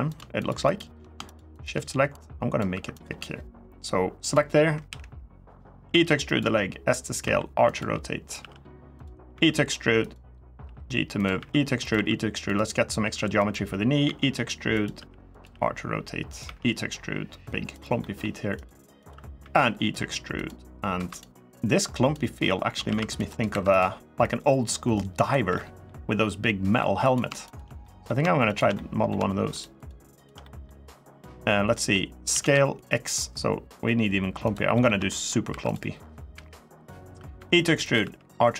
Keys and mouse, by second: 0.2 shift+click, 0.4 shift+click, 1.1 shift+click, 1.9 click, 2.5 3, 2.8 click, 4.6 KP_1, 5.7-9.1 typing, 6.0 click, 6.9 click, 7.4 click, 8.0 click, 8.7 click, 9.8 click, 10.4 g, 10.9 click, 11.1 e, 11.6 click, 11.7 e, 12.2 click, 12.8 r, 13.1 click, 13.8 e, 14.5 click, 15.1 click, 15.1 r, 15.2 g, 16.1 click, 16.2 e, 17.5 click, 17.8 middle click, 18.3 click, 18.7 click, 19.2 e, 20.1 click, 20.7 2, 21.6 click, 22.6 ctrl+r, 23.1 click, 23.3 2, 23.5 click, 24.0-25.1 drag, 25.2 3, 25.3 middle click, 26.2 middle click, 26.8 click, 27.3 shift+click, 27.6 middle click, 28.5 middle click, 29.3 shift+click, 29.9 shift+click, 30.2 middle click, 31.5 middle click, 32.1 s, 32.3 x, 34.2 click, 34.5 middle click, 34.9 shift+middle click, 35.2 3, 36.1 KP_1, 37.1 e, 37.6 click, 37.8 r, 38.4 click.